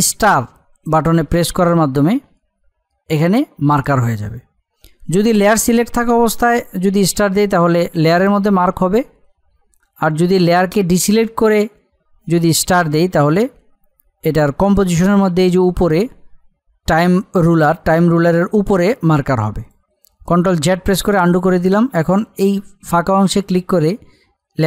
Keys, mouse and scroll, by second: 19.5 click, 20.5 ctrl+z, 23.4 click.